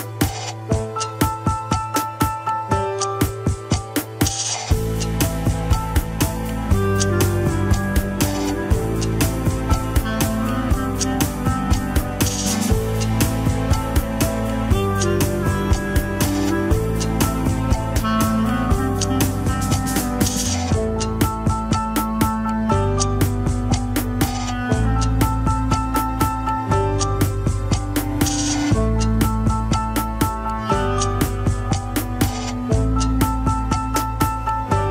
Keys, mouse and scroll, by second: 0.4-1.5 middle drag, 1.5-2.9 drag, 2.9 middle click, 3.8 click, 4.1 KP_1, 4.5 ctrl+Tab, 5.3 ctrl+s, 5.8 drag, 6.1 scroll down 4, 7.7 ctrl+Tab, 8.7 alt+r, 9.1 scroll up 10, 9.8 shift+middle click, 10.3 scroll down 3, 10.6 shift+middle click, 10.7 shift+scroll up 2, 11.0 alt+z, 12.7 click, 13.4 alt+z, 13.5-14.0 scroll up 3, 13.8 shift+middle click, 14.2 r, 18.0 scroll down 2, 18.2-20.3 middle drag, 20.3 scroll up 1, 20.6 middle click, 21.1 alt+z, 21.8 middle click, 22.7 click, 23.2 alt+z, 23.7 alt+z, 24.1 click, 24.8 alt+z, 25.4 g, 26.6-28.3 middle drag, 28.3 alt+z, 28.9-29.5 scroll down 1, 29.5 a, 29.8 alt+r, 30.4 KP_1, 30.9 shift+middle click, 31.1-31.5 scroll up 4, 31.5 alt+z, 32.1 click, 33.4 g, 34.8-34.9 scroll down 10.